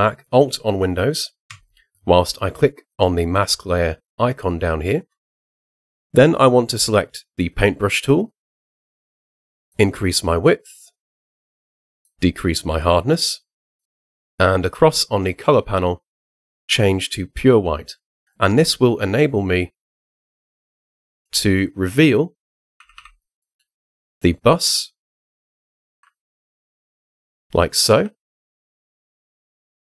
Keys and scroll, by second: 22.6 [, 25.9 ], 28.0 [.